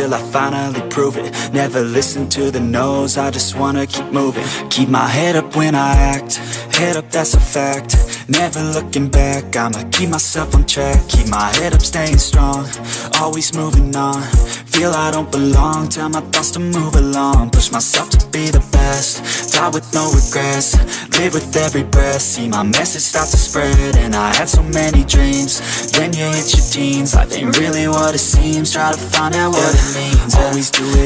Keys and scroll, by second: 0.3 ctrl+j, 0.6 ctrl+t, 1.3 ctrl+j, 1.4 ctrl+t, 4.7 ctrl+t, 6.3 ctrl+e, 11.4 ctrl+j, 11.5 ctrl+t, 12.9 ctrl+d, 13.1 ctrl+t, 15.0 ctrl+j, 15.1 ctrl+t, 18.0 ctrl+t, 27.6 ctrl+d.